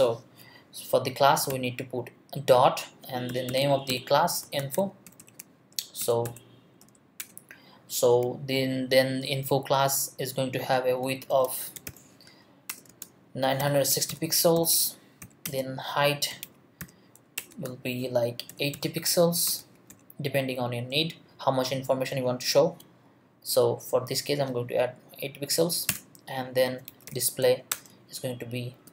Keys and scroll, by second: 1.5 ., 3.0-5.2 typing, 5.7 shift+Left, 6.0 Return, 6.2 BackSpace, 6.8 Left, 7.2 Return, 10.8-20.4 typing, 12.7 Return, 17.4 Return, 25.9 Return, 26.6-27.6 typing, 27.7 Return, 28.3 Down, 28.7 space.